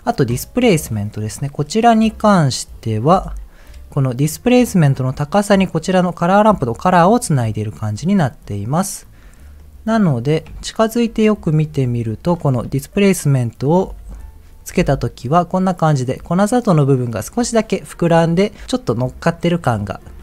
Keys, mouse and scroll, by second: 0.8 click, 1.3 scroll down 2, 1.6 middle click, 2.2 scroll up 1, 3.1 m, 7.6-8.2 scroll up 5, 8.4 middle click, 8.9 scroll up 2, 9.6 middle click, 10.0 scroll up 3, 10.6 shift+middle click, 11.1 scroll up 2, 12.2 click, 13.8 m, 14.7 m.